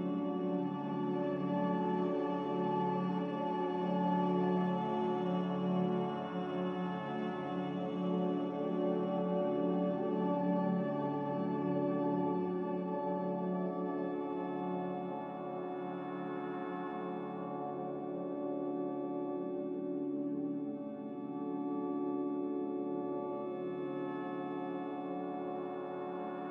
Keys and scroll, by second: 6.9 z, 9.0-10.1 typing, 9.3 Return, 14.0 typing, 14.2 Return, 18.7 z, 22.7 typing, 23.0 Return, 26.4 c.